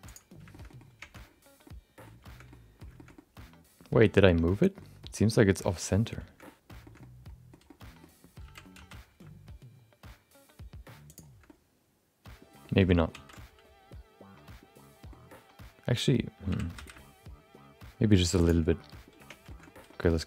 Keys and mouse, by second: 0.0 click, 0.5 shift+middle click, 0.6 middle click, 1.2 Tab, 1.6 middle click, 2.5 middle click, 2.9 shift+middle click, 3.1-4.8 middle drag, 5.0-6.1 middle drag, 6.4 middle click, 6.8 shift+middle click, 7.0 middle click, 7.6 middle click, 8.4 g, 11.6-12.6 middle drag, 14.6 ctrl+z, 15.1-16.1 middle drag, 16.5 g, 18.8 middle click, 19.1 Tab, 19.4 shift+middle click, 19.6 middle click.